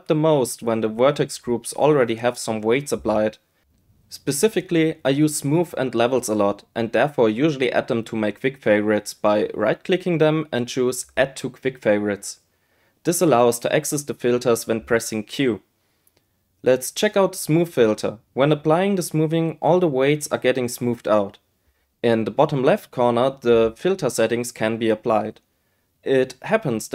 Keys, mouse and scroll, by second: 0.4-16.2 drag, 17.6 q, 19.5 q, 22.0 click, 23.3-25.0 drag, 25.4-26.9 drag.